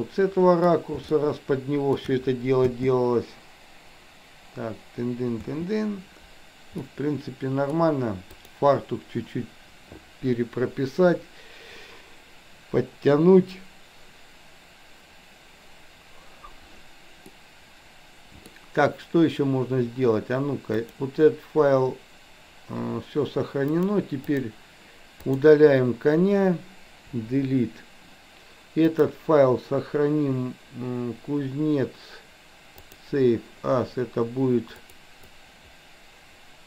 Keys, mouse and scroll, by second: 0.0-0.7 middle drag, 1.2-2.0 shift+middle drag, 2.8 space, 5.3 space, 6.8-7.8 middle drag, 8.5 click, 17.3-18.6 middle drag, 20.7 click, 23.7 click, 27.2 Delete, 28.8-33.2 drag.